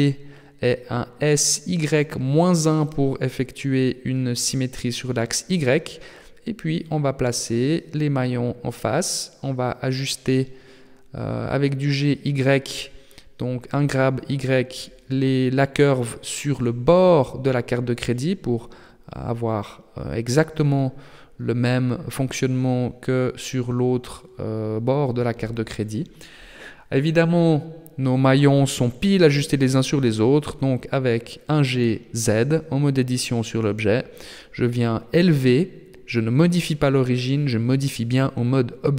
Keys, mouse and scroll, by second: 0.9 s, 4.6-5.5 scroll up 3, 5.5 g, 9.2 KP_7, 10.2 shift+middle click, 10.7-11.5 scroll up 4, 11.5 scroll up 1, 11.6 shift+middle click, 14.3 g, 17.7-18.5 scroll up 11, 19.0 shift+middle click, 20.1 g, 23.0-24.1 scroll down 14, 24.9 KP_3, 25.6-26.4 scroll down 2, 26.4-26.9 scroll up 4, 26.9 shift+middle click, 27.5-28.3 scroll up 1, 28.3 shift+middle click, 28.3 scroll up 1, 28.9-29.7 scroll up 2, 29.1 Tab, 31.7 g, 35.5 Tab, 36.6 Tab, 37.7 g.